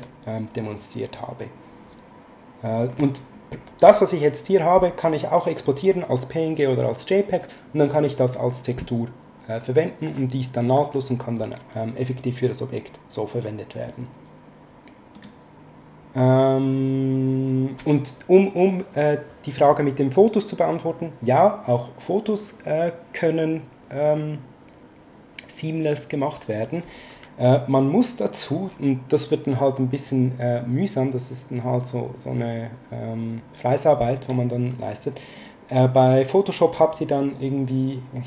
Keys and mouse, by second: 5.0 click, 15.1 click, 35.3 click.